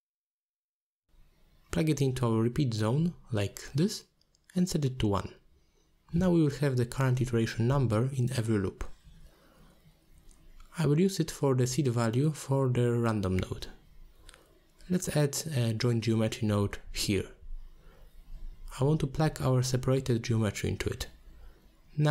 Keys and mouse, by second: 0.3 shift+a, 5.1-5.9 drag, 6.2 click, 7.2 click, 7.5 click, 8.3-8.9 drag, 9.4 h, 10.1-10.6 drag, 11.1 a, 11.2 a, 11.7 middle click, 12.7 ctrl+s, 13.4 click, 14.6 click, 14.8 shift+a, 18.6 click, 19.5-20.6 drag, 20.8 click, 21.5 middle click, 22.0 alt+shift+click.